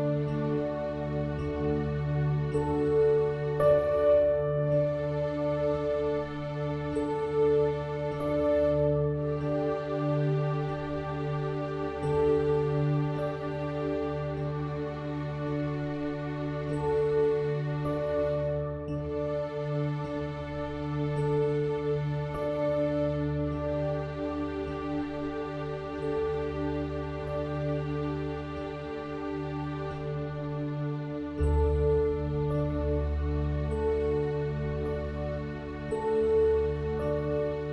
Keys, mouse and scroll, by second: 8.4-13.0 middle drag, 13.6-16.4 drag, 17.4 middle click, 19.0 KP_1, 27.7-31.8 middle drag, 31.8 alt+s, 35.5-37.4 drag, 36.8 alt+s.